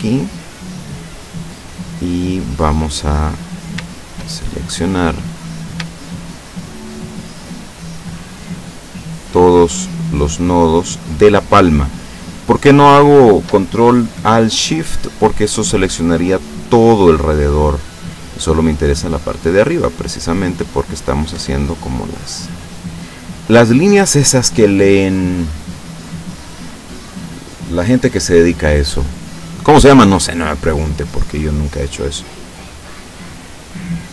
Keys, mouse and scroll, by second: 0.0 click, 1.9 middle click, 3.4 right click, 4.3 shift+middle click, 6.0 shift+right click, 7.1 shift+right click, 7.6 shift+right click, 8.5 shift+right click, 9.2 shift+right click, 9.9 shift+right click, 10.9 shift+right click, 11.7 shift+right click, 12.3 shift+right click, 13.1 shift+right click, 14.8 middle click, 17.7 scroll down 2, 18.6-21.4 drag, 21.4 Tab, 22.0-28.1 middle drag, 28.2 scroll down 1, 29.4 scroll down 1, 29.9-33.3 middle drag, 33.3-33.9 scroll up 1, 33.9-34.1 middle drag.